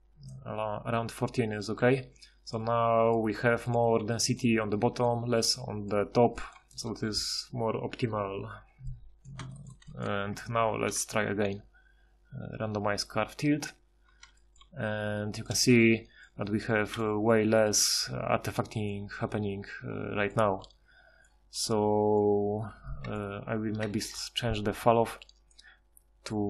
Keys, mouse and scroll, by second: 1.8 Tab, 10.7 ctrl+shift+h, 26.1 F6.